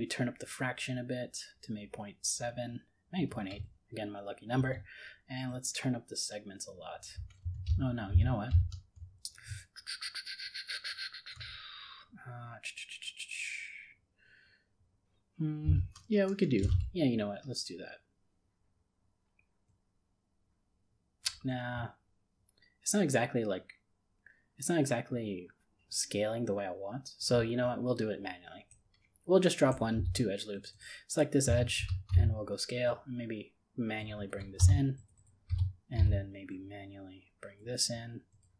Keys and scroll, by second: 7.7 ctrl+z, 16.6 ctrl+b.